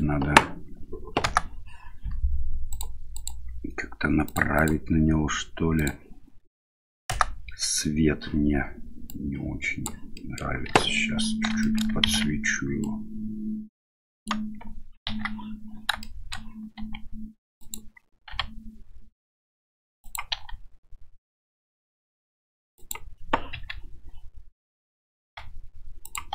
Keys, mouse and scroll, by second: 1.4 KP_0, 2.7 click, 3.2 click, 4.3 click, 4.7 click, 5.8 click, 7.2 KP_0, 9.2 click, 10.2 middle click, 10.7 KP_7, 11.7 shift+middle click, 12.1 shift+z, 12.9-14.3 right drag, 15.1 KP_3, 16.1 shift+middle click, 16.8 r, 18.4 g, 20.4 r, 23.6 KP_7, 25.3 g.